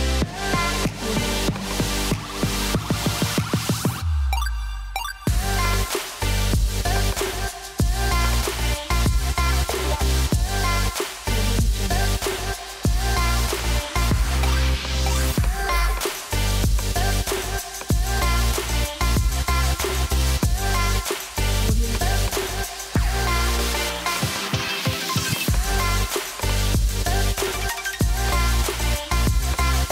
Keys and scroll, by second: 10.4 |, 10.8 0.